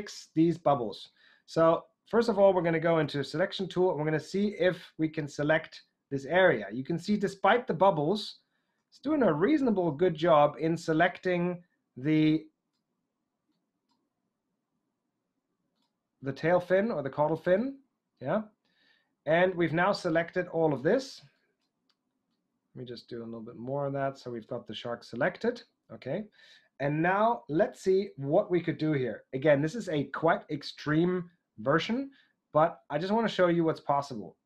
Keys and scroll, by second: 3.0 w, 3.8 ctrl+alt+w.